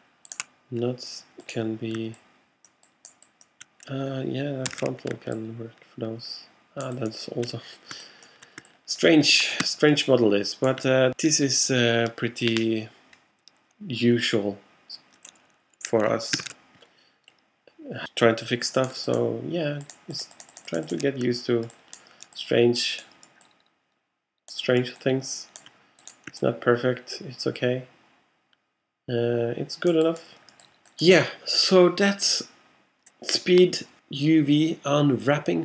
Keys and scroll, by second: 5.0 super+z, 18.1 super+z.